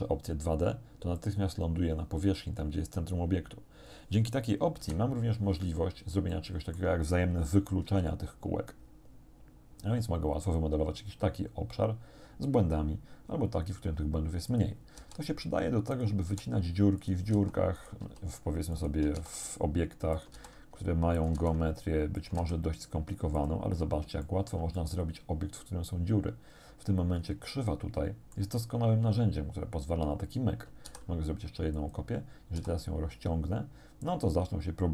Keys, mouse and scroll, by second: 1.2 click, 4.8 KP_7, 5.7-6.4 scroll down 5, 6.4 shift+middle click, 7.9 g, 14.5 click, 15.0 s, 16.0 click, 16.3 g, 17.0 click, 17.4 s, 17.8 click, 18.1 g, 18.8 shift+click, 19.2 shift+d, 20.2 shift+click, 20.4 shift+d, 21.2 shift+click, 21.4 shift+d, 22.2 shift+click, 22.4 shift+d, 23.4 click, 23.8 scroll up 1, 24.3 shift+click, 24.9-28.6 shift+drag, 30.9 shift+d, 31.8 click, 32.6 s.